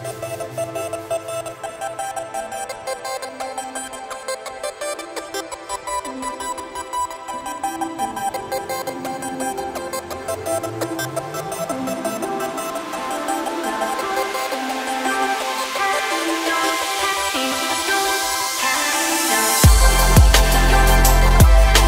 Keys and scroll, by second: 11.1 s, 14.5 s, 17.6 g.